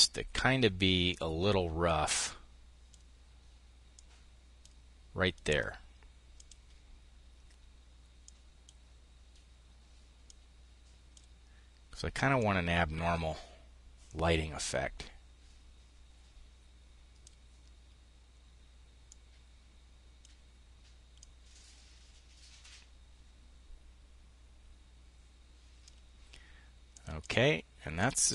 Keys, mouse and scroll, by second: 0.5-3.2 drag, 3.4-4.5 drag, 5.8-6.9 drag, 7.6 click, 9.6-11.4 drag, 11.8-17.9 drag, 18.5-20.2 drag, 20.6-26.4 drag, 26.6 click, 27.4-28.3 drag.